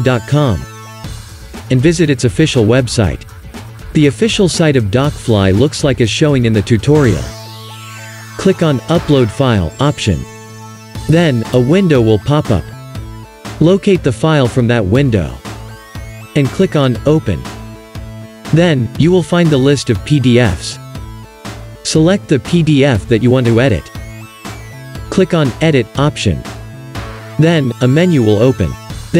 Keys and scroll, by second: 0.0-1.4 typing, 1.4 Return.